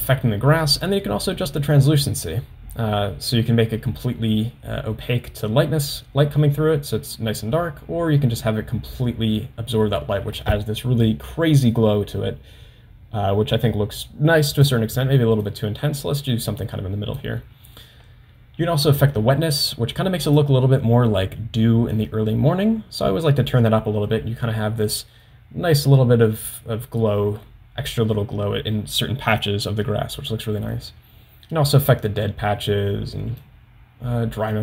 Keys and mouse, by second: 0.9-14.9 drag, 15.7-17.4 drag, 20.7-23.7 drag, 33.4-34.6 drag.